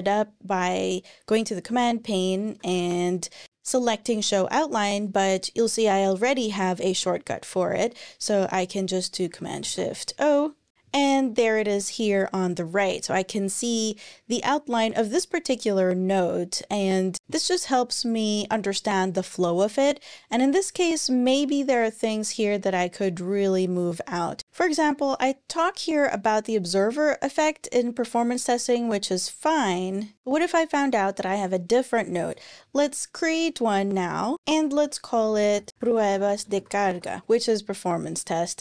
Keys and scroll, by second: 1.2-3.0 typing, 6.7 Escape, 9.4 shift+super+o, 34.4 super+n, 34.9-37.3 typing.